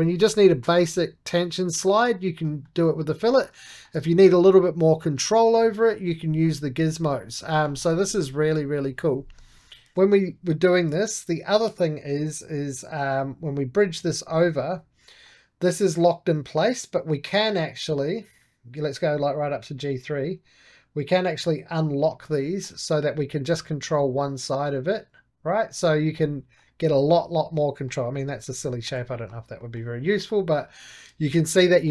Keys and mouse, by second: 2.0-4.0 middle drag, 4.0-9.8 middle drag, 9.7 ctrl+z, 10.2 2, 10.5-12.1 drag, 12.1 shift+b, 13.4-15.0 drag, 15.0-16.9 middle drag, 16.9-22.3 drag, 22.3-23.4 shift+middle drag, 23.4-25.8 drag, 26.0 click, 26.1 right click, 26.5-30.8 middle drag, 30.8 shift+z, 31.6 middle click.